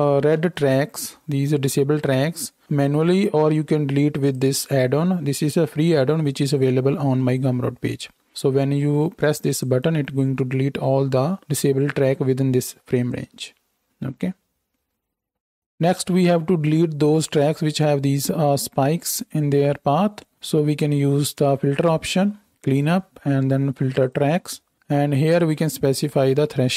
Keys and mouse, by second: 0.4 alt+a, 4.3-9.5 middle drag, 9.5-12.7 drag.